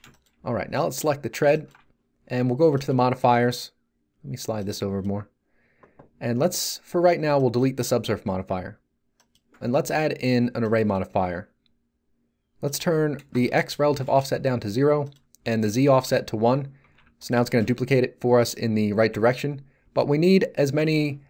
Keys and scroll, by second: 13.3 0, 14.0 Return, 15.6 1, 16.0 Return, 16.8 z.